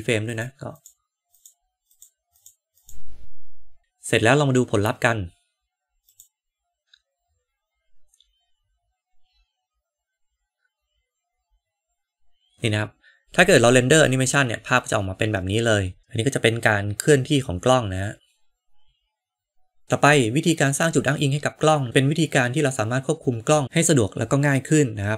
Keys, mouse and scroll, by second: 0.2 click, 0.7 click, 1.2 drag, 1.8 click, 2.7 click, 6.1 click.